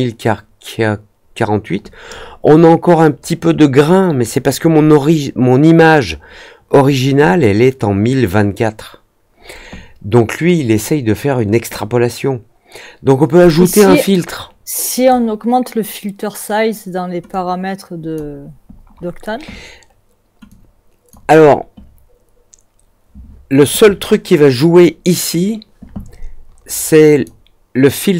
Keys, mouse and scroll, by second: 11.7-15.0 drag, 17.2-18.1 drag, 20.4-21.0 drag, 27.0 click.